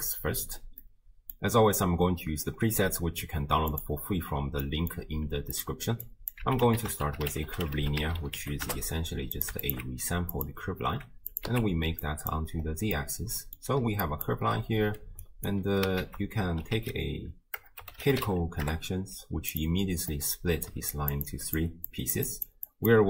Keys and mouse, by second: 1.0 middle click, 3.8 click, 4.7 middle click, 5.6 click, 6.2 click, 6.4 x, 6.8 ctrl+a, 9.7 alt+shift+click, 10.4 click, 11.3 click, 12.0 click, 12.9-13.6 middle drag, 13.8-15.5 typing, 14.1 click, 15.3 click, 16.1 ctrl+a, 20.2-20.7 drag, 20.2-20.7 middle drag, 20.7-23.0 typing, 21.0 click, 21.3 click, 22.7 click.